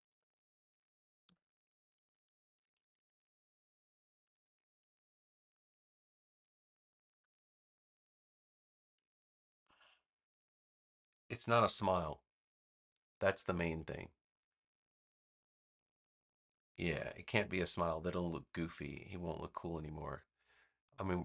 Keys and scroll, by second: 0.0 super+z, 1.1 a.